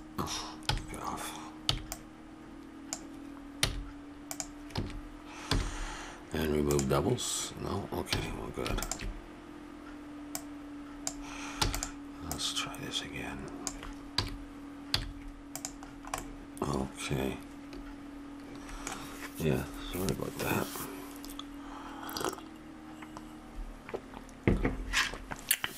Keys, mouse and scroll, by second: 0.6 n, 1.7 b, 3.7 x, 4.7 a, 5.5 w, 8.1 a, 8.8-12.1 drag, 11.7 e, 12.3-13.4 drag, 13.6 click, 14.1 a, 14.9 z, 15.8 middle click, 16.3-17.8 middle drag.